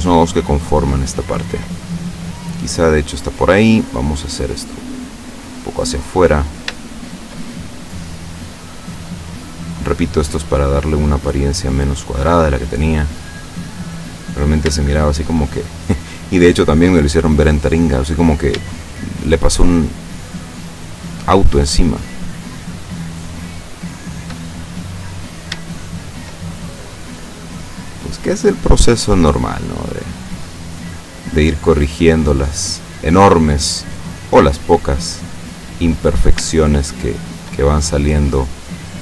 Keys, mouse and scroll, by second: 0.3 shift+right click, 1.8-3.3 shift+middle drag, 4.0-6.7 drag, 6.9-9.8 shift+middle drag, 10.4-12.3 drag, 12.4-14.9 middle drag, 15.0 shift+middle click, 15.6-17.1 shift+middle drag, 18.2 right click, 18.8 shift+right click, 19.7 shift+right click, 20.2 shift+right click, 20.9 shift+right click, 21.6 shift+right click, 22.0 shift+right click, 22.8 shift+right click, 23.3 shift+right click, 24.4-25.7 shift+middle drag, 26.1 shift+right click, 26.4-27.5 shift+middle drag, 28.2-32.2 drag, 32.5-34.8 middle drag, 35.7 right click, 36.7 shift+right click, 37.2 shift+right click, 37.7 shift+middle click, 38.9-39.0 drag.